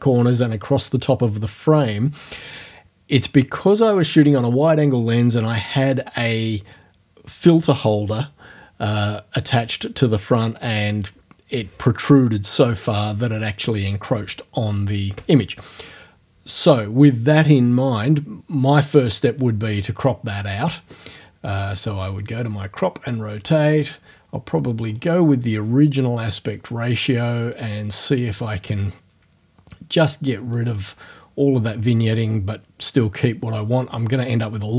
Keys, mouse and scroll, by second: 19.3 click, 22.0 click, 22.3-23.7 middle drag, 23.7 click, 24.0 middle click, 24.9 click, 25.2-26.2 middle drag, 26.6-27.7 drag, 28.3-30.7 drag, 30.7 middle click.